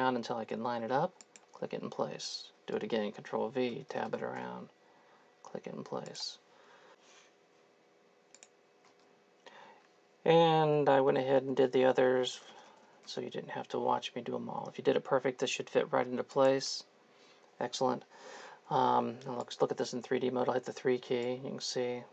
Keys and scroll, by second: 2.7 ctrl+v, 3.7 Tab, 3.9 Tab, 4.1 Tab, 4.4 Tab, 8.9 ctrl+v, 10.7 Tab, 10.9 Tab, 11.2 Tab, 11.4 Tab, 11.6 Tab, 11.9 Tab, 12.2 Tab, 12.5 Tab, 20.9 3.